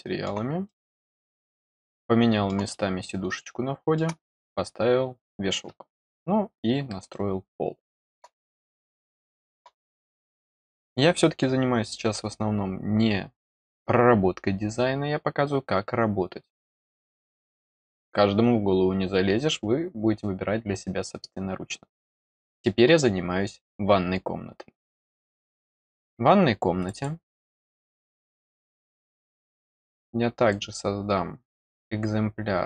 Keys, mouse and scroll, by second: 0.6 middle click, 1.4-2.4 middle drag, 2.6 middle click, 3.3 middle click, 6.0 scroll down 1, 7.0-8.1 middle drag, 8.6 scroll up 1, 22.1 middle click, 22.8-25.2 scroll up 1, 26.7 click, 26.9 click, 27.6 middle click, 27.8 middle click.